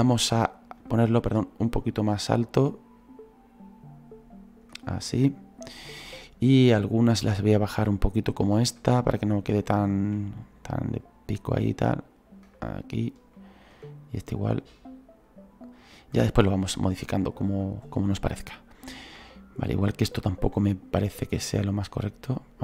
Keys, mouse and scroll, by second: 5.1-7.9 middle drag, 7.9-22.6 drag.